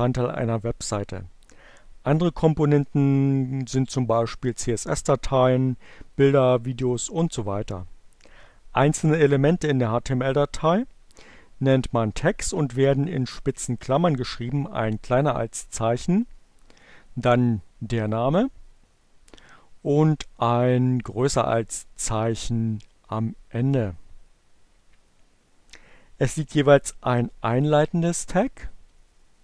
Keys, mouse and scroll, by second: 16.0 click, 17.6 click, 20.0 click, 28.3-29.4 drag.